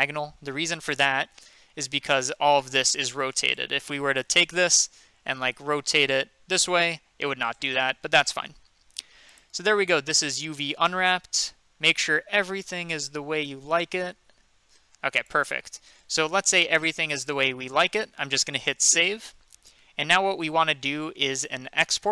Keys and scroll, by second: 6.1 r, 8.0 ctrl+z, 11.9 a, 18.9 ctrl+s.